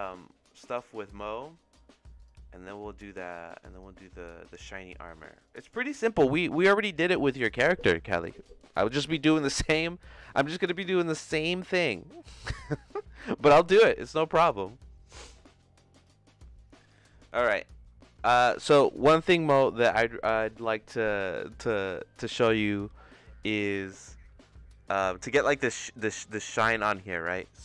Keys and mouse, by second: 2.2 click, 5.3 click, 15.9 click.